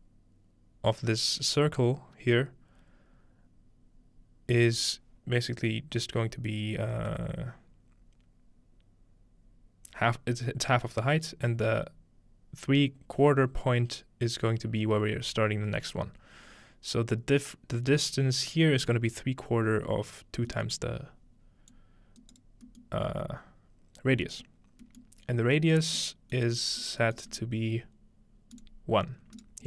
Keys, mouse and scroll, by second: 20.5-22.4 middle drag, 21.7 click, 22.2 right click, 24.0-25.6 scroll down 2, 27.3-28.3 scroll up 2, 28.6-29.6 drag, 29.4 right click.